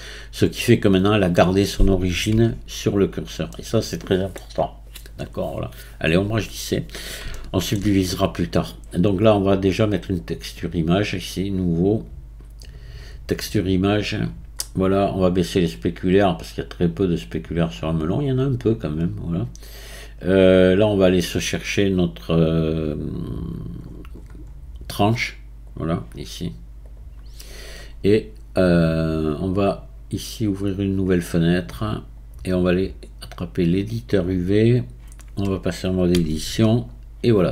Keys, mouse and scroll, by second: 1.0-2.2 scroll up 1, 2.4 Tab, 3.5-4.9 middle drag, 4.9-6.4 right drag, 6.4-7.4 scroll down 1, 7.4-10.2 shift+middle drag, 10.2 click, 11.2-11.8 drag, 11.8-12.6 scroll down 2, 12.6-14.2 drag, 14.2-16.0 scroll down 6, 16.0-19.0 drag, 19.0-20.6 scroll up 1, 20.6-23.7 drag, 30.8-35.8 drag, 36.2 Tab, 36.9 scroll down 3.